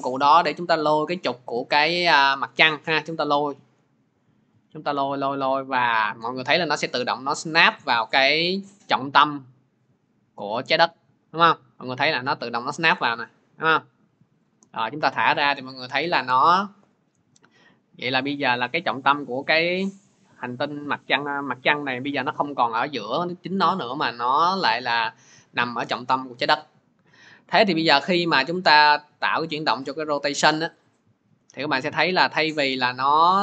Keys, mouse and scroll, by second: 14.2 click, 17.5 click, 18.7 middle click, 24.3 middle click, 28.2-33.3 middle drag.